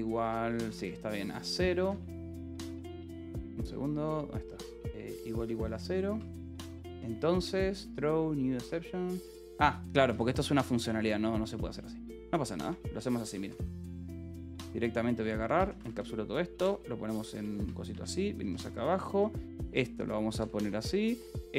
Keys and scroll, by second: 0.0-3.2 typing, 0.8 Escape, 4.6 =, 5.3 Escape, 6.0 a, 6.2 space, 6.4 Escape, 6.7 l, 8.8 h, 9.7 l, 10.0 v, 10.4 Escape, 10.6 h, 12.7-21.3 typing, 19.6 Escape.